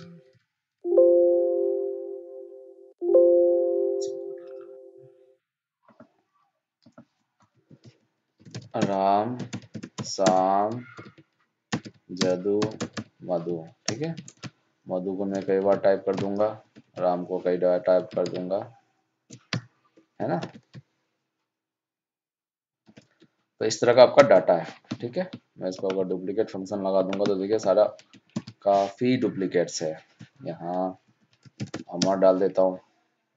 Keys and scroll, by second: 0.2 alt+d, 15.6 ctrl+d, 16.8 ctrl+c, 20.0 ctrl+Up, 24.1 ctrl+shift+Down, 28.3 ctrl+Home.